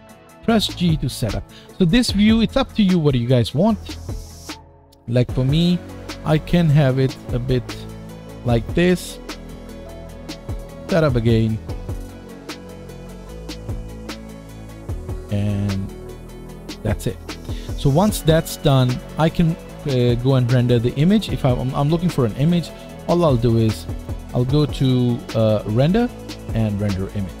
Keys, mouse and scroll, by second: 0.4 g, 4.5 g, 8.9-16.6 drag, 13.8 g, 16.6-25.7 middle drag, 25.7-27.4 drag.